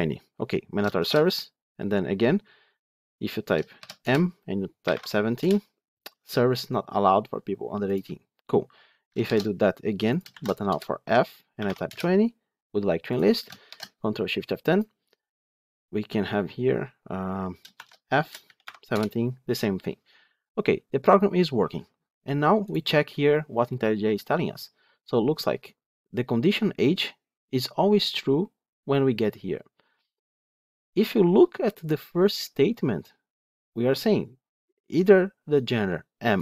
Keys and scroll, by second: 0.9 ctrl+shift+F10, 9.1 ctrl+shift+F10.